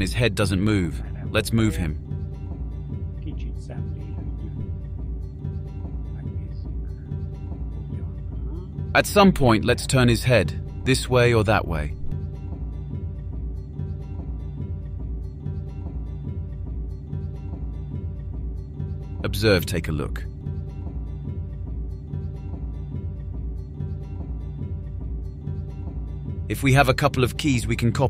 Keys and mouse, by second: 3.6-9.3 drag, 9.8 click, 10.4 click, 10.6-16.1 drag, 16.9 ctrl+z, 18.0 click, 18.7 click, 18.8-21.1 drag, 22.2-23.1 drag, 23.6-25.5 drag, 28.0 click.